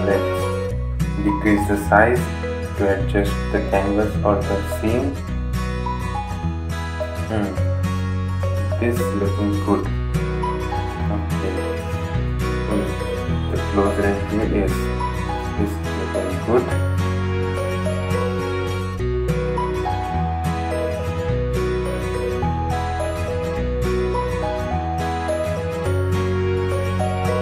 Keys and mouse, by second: 13.9 typing, 21.6 ctrl+Num_Lock, 22.2 ctrl+t, 23.2-27.4 drag.